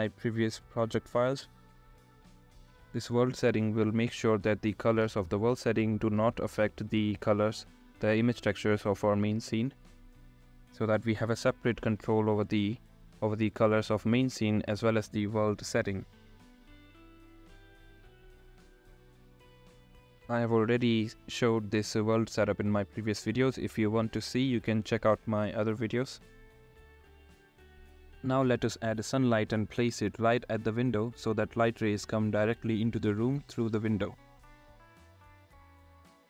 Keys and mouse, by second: 1.7 click, 2.3 click, 5.7-6.6 drag, 7.9 click, 9.7 click, 12.1 middle click, 12.4 middle click, 16.9-18.7 middle drag, 22.0-22.5 drag, 27.3 middle click, 33.9 click, 35.5 click.